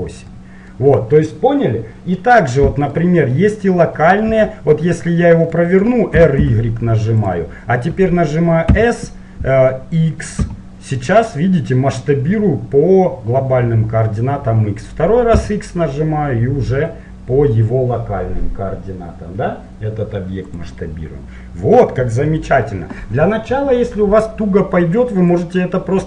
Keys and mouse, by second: 5.3-7.2 middle drag, 6.2 r, 8.8 s, 25.4-26.0 drag.